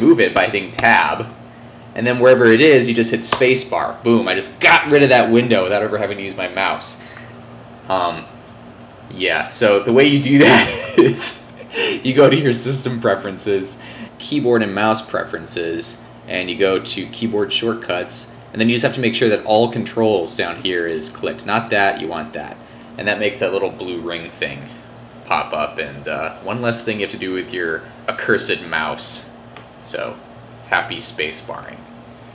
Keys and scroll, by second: 9.9 super+Tab.